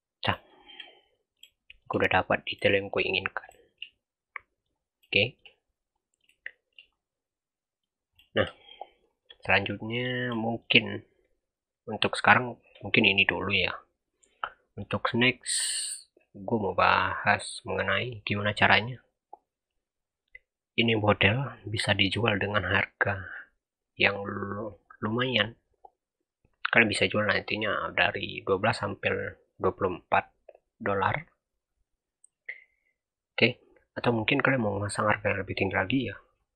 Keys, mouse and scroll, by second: 0.3-3.7 shift+middle drag, 3.8-4.2 scroll up 3, 4.2-4.8 middle drag, 4.8 scroll down 4, 5.0-5.4 shift+middle drag, 5.4-5.8 scroll up 1, 5.8 middle click, 6.7 scroll up 1, 7.0-8.0 middle drag, 8.0 scroll down 3, 8.1-9.0 shift+middle drag, 9.0 click, 9.6-36.5 middle drag.